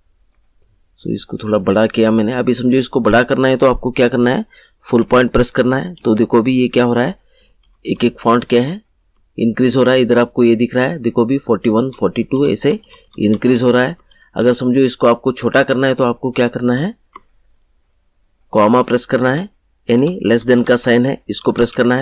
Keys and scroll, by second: 4.9 ., 11.7 ., 19.2 /.